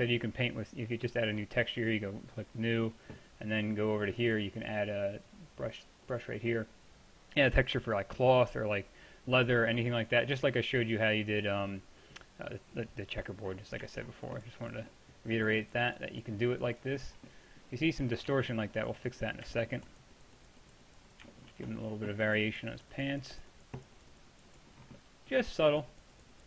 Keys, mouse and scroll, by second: 1.5-8.4 drag, 8.6-9.5 middle drag, 10.2-10.7 middle drag, 14.2-18.6 drag, 18.8 click, 19.7-21.5 middle drag, 21.5-23.3 drag, 24.4-24.8 drag, 24.8-26.4 middle drag.